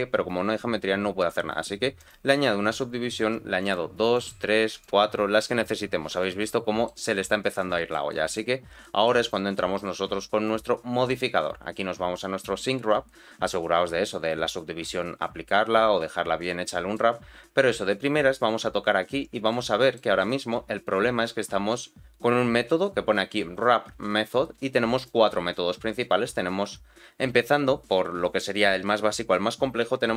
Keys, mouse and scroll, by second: 2.0 click, 3.6 click, 4.1 click, 4.7 click, 6.2 middle click, 7.0 scroll down 1, 7.6 shift+middle click, 8.1 middle click, 8.5 scroll down 1, 8.8 shift+middle click, 10.4 click, 16.1-16.6 scroll up 2, 16.6 middle click, 17.2-18.7 scroll down 2, 19.5 middle click, 24.9-30.1 drag.